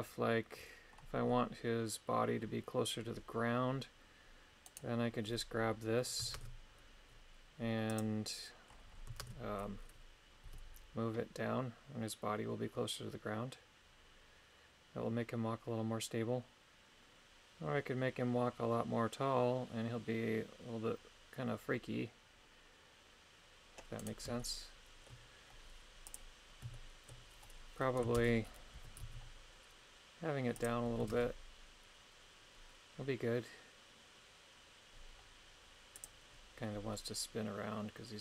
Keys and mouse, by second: 4.7 right click, 6.3 shift+space, 7.9 click, 9.2 shift+space, 10.4 g, 24.0 right click, 24.4 shift+middle click, 26.1 click, 26.7 shift+middle click, 28.2 shift+space, 28.7 g, 29.0 z, 30.6 click, 31.1 shift+space, 36.0 click.